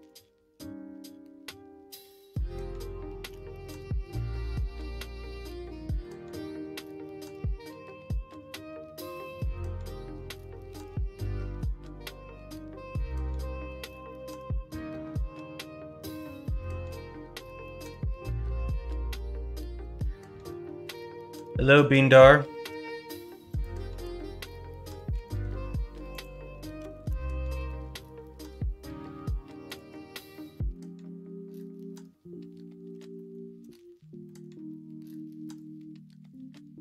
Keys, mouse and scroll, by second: 0.5 s, 3.2 g, 11.1 s, 24.0 Tab, 25.1 a, 26.7 s, 33.1 shift+middle click, 33.9 middle click, 34.4 scroll down 1, 34.6-35.0 scroll up 1, 35.0-36.2 scroll down 1, 36.2-36.8 scroll down 1.